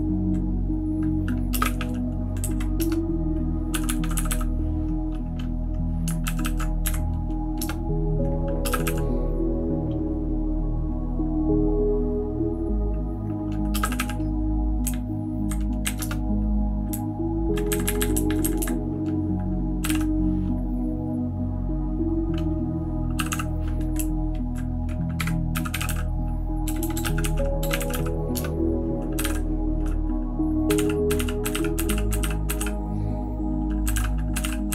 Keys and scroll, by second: 1.5 space, 1.6 e, 1.8 e, 2.4 Down, 2.8 Return, 3.7-4.3 typing, 6.2 ctrl+w, 6.4 ctrl+w, 6.8 Up, 7.6 Return, 8.6 space, 8.7 e, 8.8 e, 13.8 e, 14.0 e, 14.8 Up, 15.3 Up, 15.4 Up, 15.8 Up, 16.0 Return, 16.9 Down, 17.4 Down, 17.5 Down, 17.7 Up, 17.8 Up, 18.0 Up, 18.1 Up, 18.2 Up, 18.6 Up, 19.6-20.3 typing, 23.1 g, 23.3 g, 24.0 Down, 24.2 Down, 25.3-33.1 typing, 26.8 shift+Tab, 26.9 shift+Tab, 33.9 alt+., 34.4 alt+;.